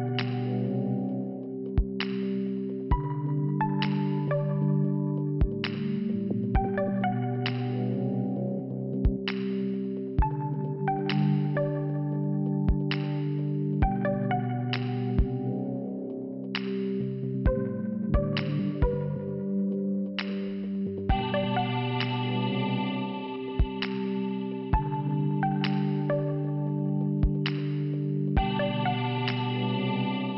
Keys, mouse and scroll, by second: 2.9 scroll up 1, 3.3 scroll down 2, 7.0 shift+Return, 7.5 click, 9.4 click, 10.5 click, 11.9 click, 11.9 click, 17.8 click, 19.4 click, 19.9 click, 20.9 click, 22.3 click, 23.2 scroll up 1, 25.1 click.